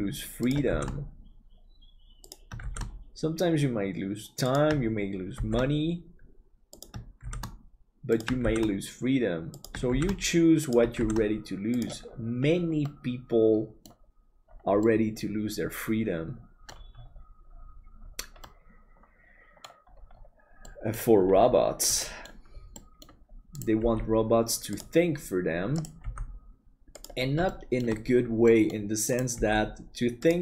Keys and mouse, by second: 12.9 middle click, 14.9-16.7 middle drag, 18.5-19.6 middle drag, 20.7 middle click, 22.1 middle click, 22.7 middle click, 23.7 g, 26.0 g, 27.4 middle click, 28.5 middle click, 29.3 g.